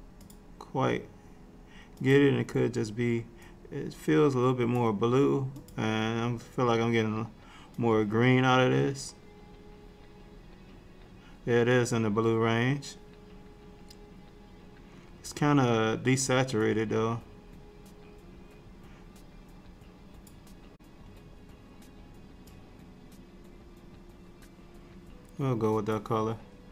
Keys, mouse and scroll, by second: 0.2 click, 0.2-2.6 scroll down 1, 5.6 click.